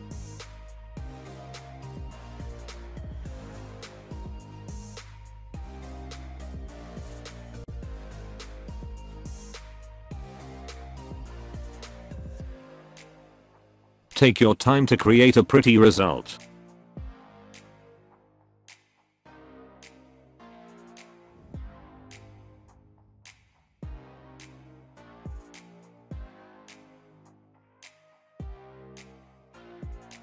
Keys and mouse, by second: 1.1 e, 2.5 e, 5.2 e, 7.2 e, 8.8 e, 14.8 e, 16.0 alt+middle click, 16.9 e, 20.7 e, 25.7 shift+middle click, 26.6-30.2 typing, 26.7 shift+middle click, 28.0 click, 28.2 click, 28.5 alt+click, 28.7 click, 29.1 click, 30.1 shift+middle click.